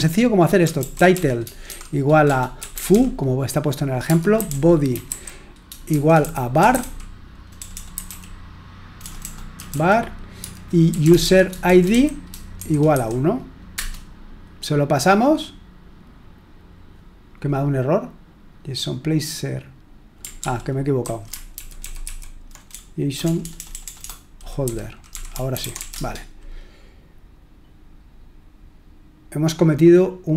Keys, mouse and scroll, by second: 0.0-2.9 typing, 4.0-13.7 typing, 20.3 ctrl+p, 21.0 ctrl+a, 21.5 alt+f, 21.8 alt+f, 22.0 alt+f, 22.7-26.2 typing.